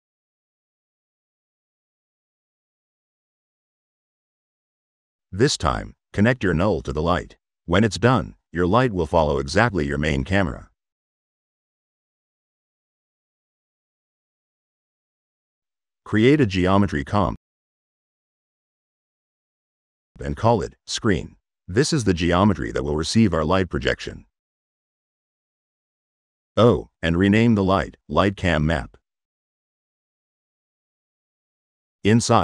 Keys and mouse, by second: 0.7 click, 1.6 click, 2.6 click, 3.5 click, 5.0 click, 6.0-6.5 drag, 12.8 click, 13.5 click, 13.9 middle click, 14.3-14.8 drag, 15.2 click, 16.3 e, 17.8 click, 19.4 click, 25.4 click, 31.7 click, 32.3 middle click.